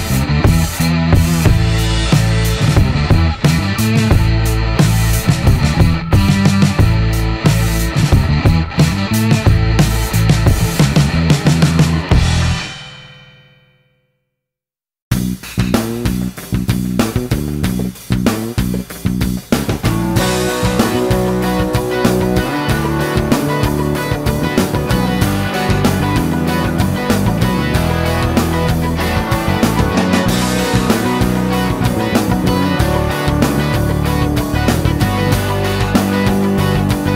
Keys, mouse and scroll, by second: 3.0 click, 3.3 space, 4.5 shift+middle click, 5.3 shift+click, 5.9 shift+right click, 8.2 click, 8.9 shift+middle click, 12.4 click, 13.3 click, 14.3 click, 15.1-16.1 typing, 18.8 click, 20.0 click, 21.5 shift+right click, 25.2 click, 27.3 click, 28.3 ctrl+click, 29.7 click, 30.8 click, 33.1 click.